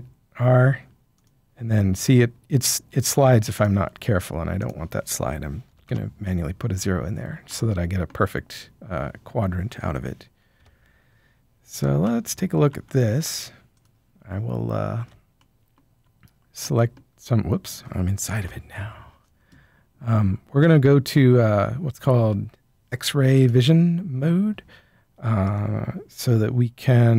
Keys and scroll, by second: 5.6 0, 5.8 Return, 10.5 7, 18.3 7.